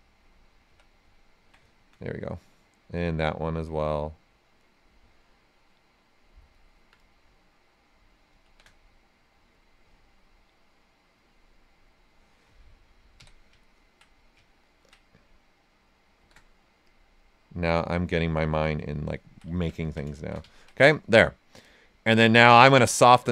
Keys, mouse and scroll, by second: 0.6 d, 1.1 ctrl+right click, 3.0 click, 6.5 alt+right click, 6.9 right click, 8.4 shift+d, 9.3 click, 13.1 d, 13.6 ctrl+right click, 14.1 right click, 16.1 shift+d, 16.8 click, 18.4 d, 18.9 ctrl+right click, 20.1 shift+f, 20.4 ctrl+right click, 20.9 right click.